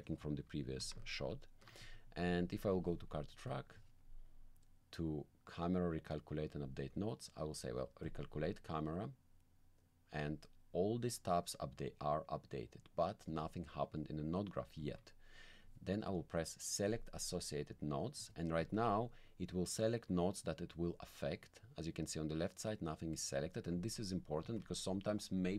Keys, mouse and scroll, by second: 0.8 ctrl+click, 1.2 ctrl+click, 1.8 ctrl+click, 3.5 click, 6.6 click, 8.0 click, 14.8 alt+middle click, 16.9 click, 18.7 alt+click, 21.4 click, 23.2 middle click, 23.8 alt+middle click, 24.5 alt+click.